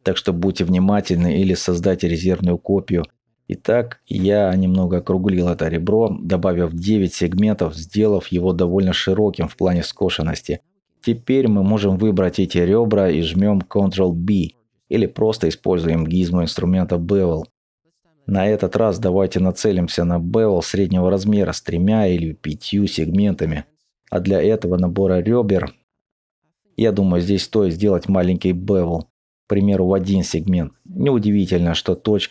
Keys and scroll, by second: 2.8 Tab, 8.3 alt+shift+Tab.